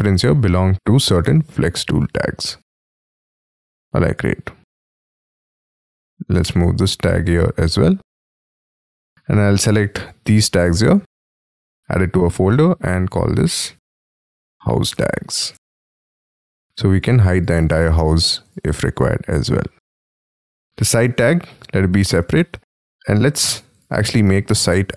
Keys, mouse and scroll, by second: 0.8-1.2 scroll up 5, 6.1 double click, 10.6 shift+click, 13.9-15.2 typing, 20.7 double click, 22.0-23.3 scroll down 17.